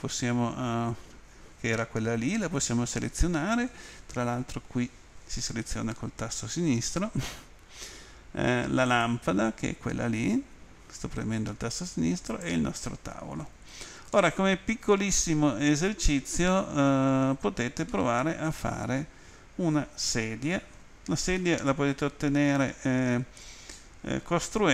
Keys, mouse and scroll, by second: 0.8-2.0 scroll down 2, 8.9 click, 12.3 click, 14.1 middle click, 15.5 scroll up 1, 17.9 middle click, 21.4 middle click.